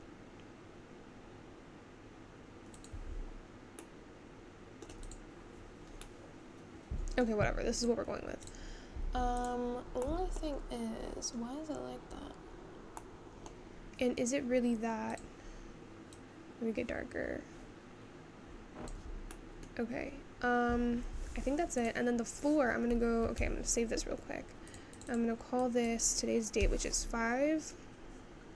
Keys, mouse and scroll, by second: 16.4 click.